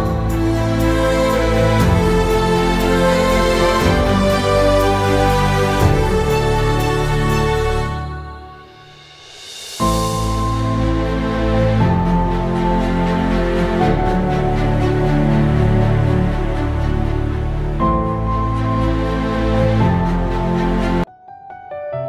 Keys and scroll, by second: 0.0-2.6 typing, 3.8-12.0 typing, 13.4 ctrl+Print, 14.8-21.4 typing.